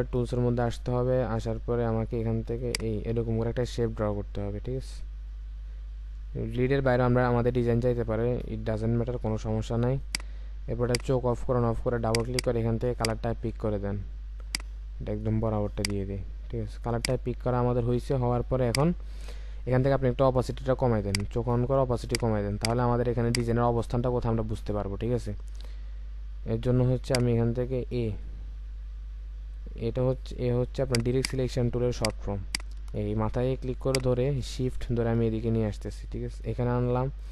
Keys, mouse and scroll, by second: 12.2 double click, 31.1 right click.